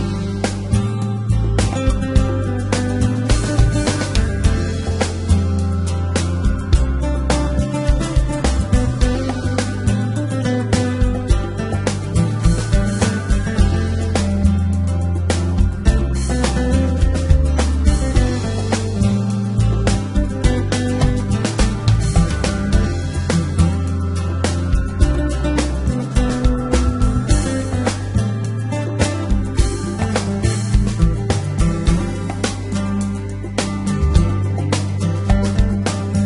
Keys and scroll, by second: 0.8 e, 2.3 s, 6.0 e, 6.6 g, 7.1 x, 11.4 \, 28.4 e, 28.6 g, 28.8 x, 30.6 e, 31.1 s, 33.2 g, 33.3 x, 35.4 Escape, 36.0 e.